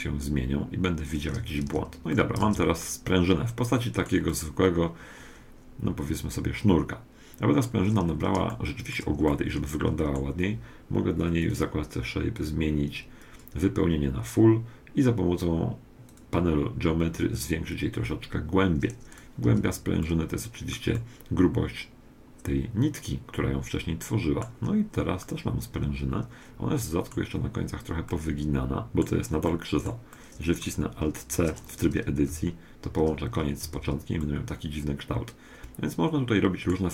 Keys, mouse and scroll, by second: 1.1-2.2 scroll up 1, 1.4 a, 1.7 z, 2.2-6.1 middle drag, 2.4 Tab, 8.0-11.3 middle drag, 11.5-14.3 drag, 16.1-19.5 drag, 19.4 z, 20.0-22.8 middle drag, 25.2-27.0 middle drag, 28.1-31.3 middle drag, 31.3 Tab, 31.7 middle click, 31.9 middle click, 32.8 alt+c, 33.6 Tab, 34.2-36.0 middle drag.